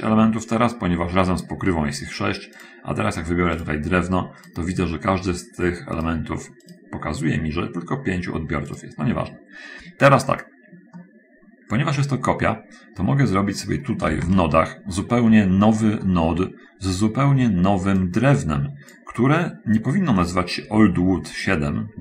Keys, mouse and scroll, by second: 3.0 click, 4.8 right click, 6.4 right click, 6.8 right click, 9.2 right click, 10.6 middle click, 11.6-12.8 middle drag, 13.5 scroll up 1, 14.3 shift+space, 15.3-15.8 scroll down 2, 15.8-16.2 scroll up 2, 16.4 middle click, 18.4-19.5 drag.